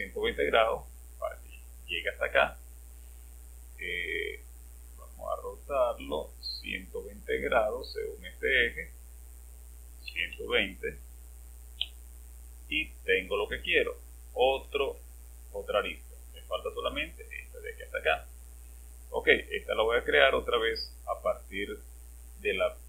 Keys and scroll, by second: 9.9-11.7 typing.